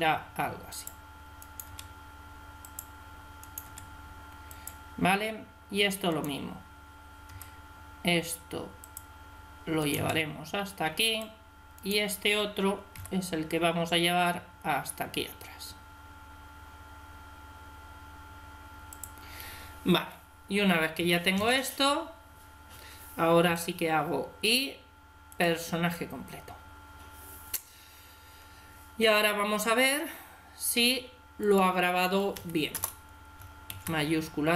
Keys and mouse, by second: 1.3 right click, 1.5 r, 3.5 r, 7.2 r, 9.7 right click, 9.8 r, 12.8 g, 13.0 right click, 20.8 a, 21.2 a, 23.3 i, 31.2-33.1 drag, 33.6 alt+a.